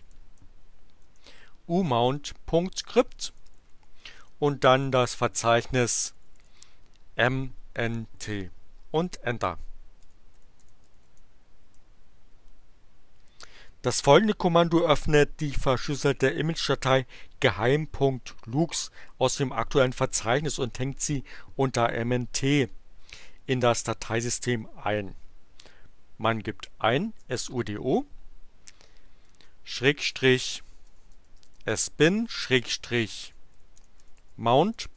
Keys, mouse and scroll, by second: 1.0 u, 1.9 Right, 3.1 Left, 4.8 Delete, 9.0 Return, 9.7-11.5 typing, 11.6 Return, 26.9-28.0 typing, 29.2-34.9 typing.